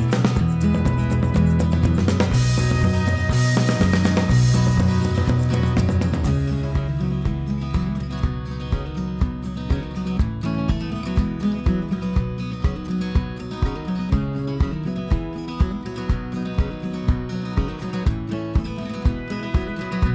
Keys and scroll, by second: 0.0-1.1 typing, 3.4-4.3 typing, 8.4-9.3 typing.